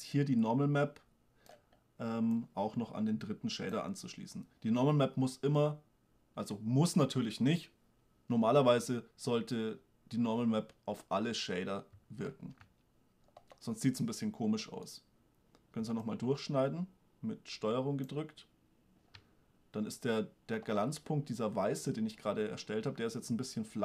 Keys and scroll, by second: 12.6 shift+space.